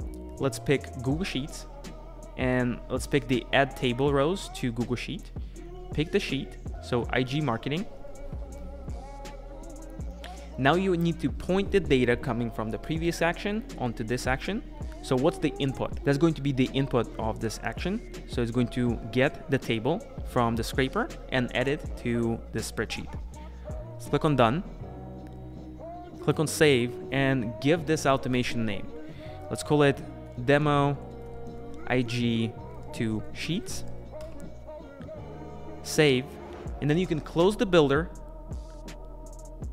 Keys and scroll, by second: 35.0 Return.